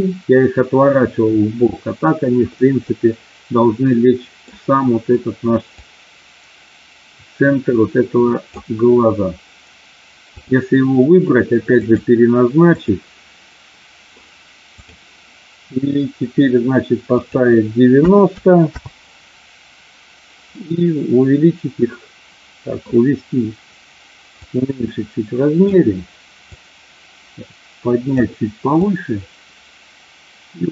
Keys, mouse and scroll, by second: 2.6-4.6 middle drag, 5.8-8.4 drag, 10.3 click, 11.8-12.9 drag, 17.0-18.9 drag, 20.5-22.8 middle drag, 24.4-25.8 drag, 26.4-28.2 drag, 28.7-30.7 drag.